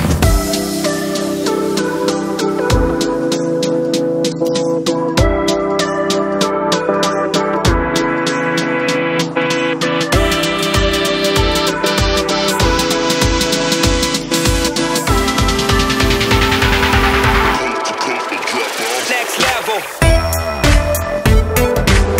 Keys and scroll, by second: 11.2 [, 11.5 [.